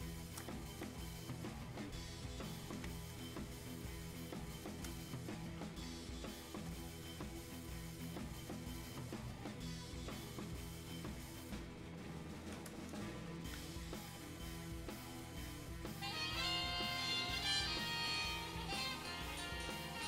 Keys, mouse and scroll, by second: 2.8 shift+space, 3.8 shift+click, 3.9 shift+space, 5.2 click, 8.4 click.